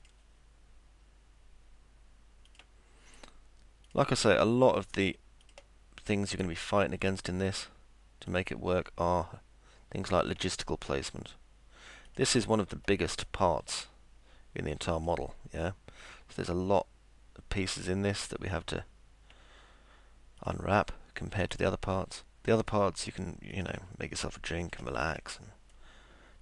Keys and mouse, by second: 0.0 click, 2.5 click, 3.9 click, 5.4 click, 8.3 click, 10.2 ctrl+click, 12.1 ctrl+click, 12.8 middle click, 15.0 ctrl+click, 18.1 ctrl+click, 20.4 ctrl+click, 21.5 ctrl+click, 23.5 ctrl+click, 24.6 ctrl+click, 25.2 middle click.